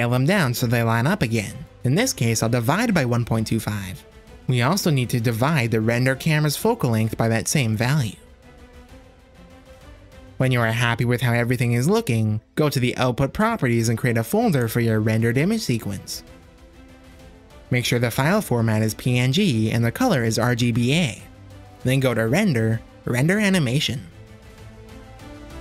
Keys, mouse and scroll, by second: 0.6-4.5 drag, 6.8-10.3 drag, 7.8 BackSpace, 13.4 click, 15.4 drag, 19.1 click, 21.7 ctrl+s, 23.3 click, 24.3-25.6 drag.